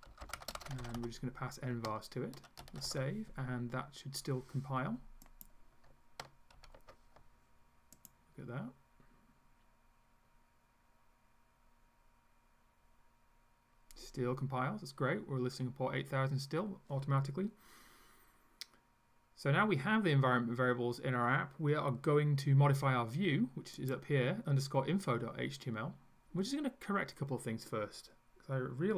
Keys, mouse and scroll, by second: 0.0-1.5 typing, 2.6 ctrl+s, 5.3 click, 6.6 ctrl+s, 8.0 click, 23.8 click, 25.6 scroll up 1, 26.1-26.5 scroll up 2.